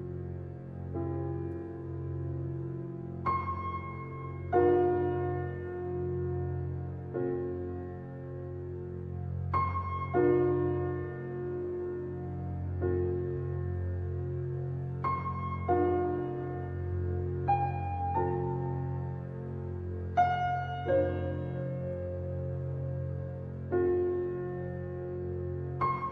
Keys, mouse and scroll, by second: 0.4 g, 3.7-4.2 middle drag, 4.2 scroll up 2, 4.5-6.2 shift+middle drag, 6.2 s, 11.4 g, 13.2-16.5 middle drag, 16.5-16.8 scroll up 1, 16.8-21.6 shift+middle drag, 21.6 click, 23.0 Tab, 23.5-25.8 middle drag, 25.8-26.1 drag.